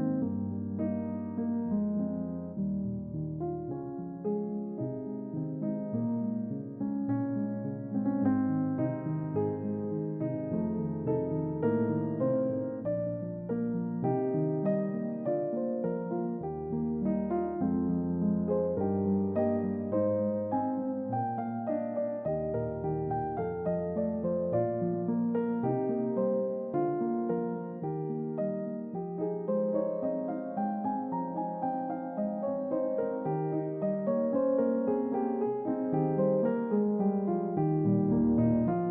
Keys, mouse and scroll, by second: 1.3-4.7 drag, 5.1-5.5 middle drag, 5.9 ctrl+middle click, 6.4-8.5 ctrl+middle drag, 8.7 ctrl+middle click, 9.7-10.3 middle drag, 11.4-12.9 drag, 13.3-14.2 middle drag, 14.4 ctrl+middle click, 14.8-16.6 ctrl+middle drag, 16.8 ctrl+middle click, 17.6 click, 19.0-19.9 middle drag, 21.0-25.2 middle drag, 25.7 ctrl+middle click, 26.4-27.3 middle drag, 33.3-37.1 drag, 38.4-38.9 scroll up 1.